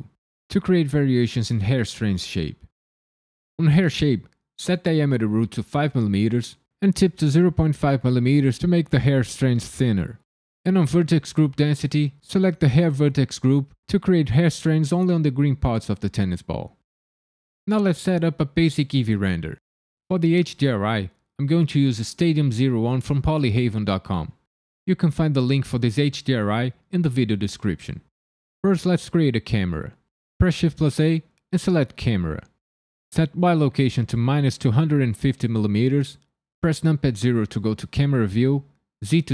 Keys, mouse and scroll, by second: 3.5 click, 4.6 click, 8.8-10.5 scroll down 4, 10.5 click, 11.0-12.3 scroll down 3, 12.3 click, 30.4 shift+a, 33.4 click, 36.9 KP_0, 39.0 z.